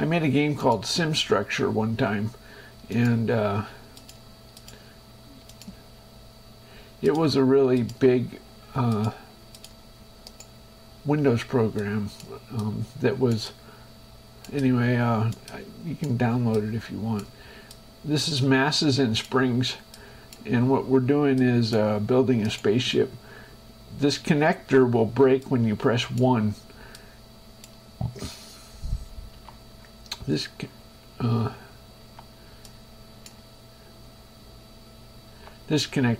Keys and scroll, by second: 29.6 2, 32.3 1, 35.6 2.